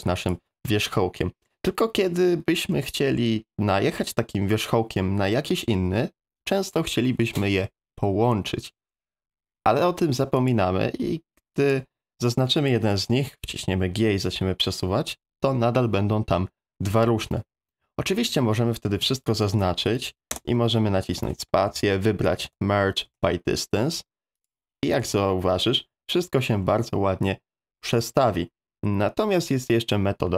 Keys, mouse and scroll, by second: 1.2 middle click, 2.8 shift+middle click, 13.4 g, 18.9 a, 20.3 space, 24.4 click, 25.0 g.